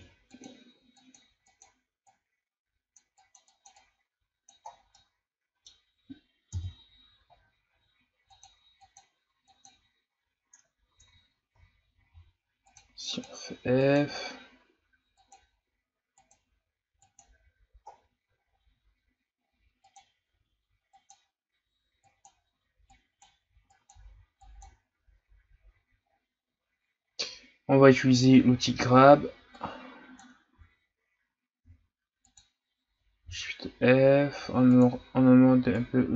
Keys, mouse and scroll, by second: 0.3-4.7 drag, 4.7 scroll down 4, 5.0-6.5 middle drag, 6.5 KP_1, 7.4-8.3 ctrl+scroll up 2, 8.3-10.9 drag, 10.9 ctrl+z, 12.1 f, 13.1-17.9 drag, 17.9-19.1 scroll down 7, 19.4 scroll up 1, 19.8-25.2 drag, 25.2-26.2 scroll down 5, 26.2-26.7 scroll up 3, 28.2-30.5 drag, 30.5 ctrl+z, 31.6 f, 33.2 shift+f, 35.8-36.1 drag.